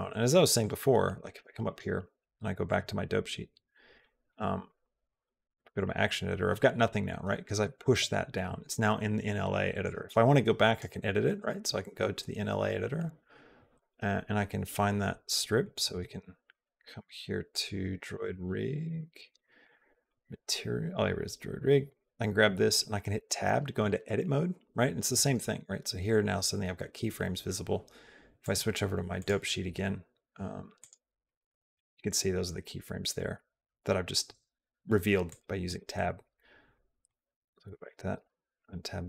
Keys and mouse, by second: 0.4 click, 1.5-2.6 drag, 3.5 click, 4.5 click, 4.9 click, 9.8 click, 11.5-13.7 drag, 17.3 click, 18.7 click, 19.0 click, 19.4 click, 19.7 click, 20.1 click, 20.7 click, 23.0 Tab, 28.4 click, 30.6 click, 35.2 click, 35.9 click, 36.9 click, 38.1 Tab.